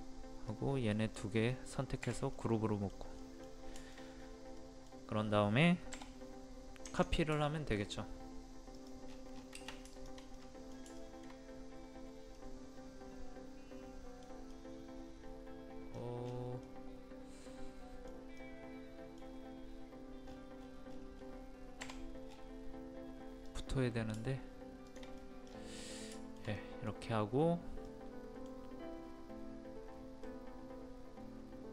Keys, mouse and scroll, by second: 1.5-4.1 middle drag, 4.1-4.6 scroll up 1, 4.6 middle click, 5.1-5.9 scroll up 1, 5.9 m, 6.8 click, 7.1 scroll down 1, 7.4 shift+middle click, 8.7 click, 9.0 scroll down 1, 9.1 scroll up 1, 9.3 scroll down 1, 9.9 shift+click, 10.3 middle click, 11.0 shift+middle click, 11.9-12.3 scroll up 1, 12.3-14.5 middle drag, 14.5-15.9 middle drag, 15.9-16.2 scroll down 1, 16.6-19.8 middle drag, 20.2-20.6 scroll up 1, 21.8 m, 23.4 click, 24.8 shift+click, 25.2 middle click, 25.4-26.1 scroll down 1, 26.1 shift+middle click, 26.5 middle click, 27.1 scroll up 1, 27.8 middle click.